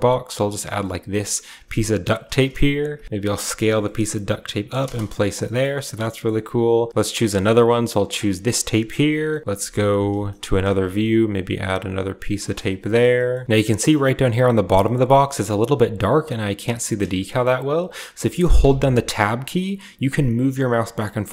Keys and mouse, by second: 2.4 ctrl+KP_7, 7.2 middle click, 8.7 KP_7, 9.4 KP_1, 9.4 KP_3, 11.8-21.3 shift+middle drag.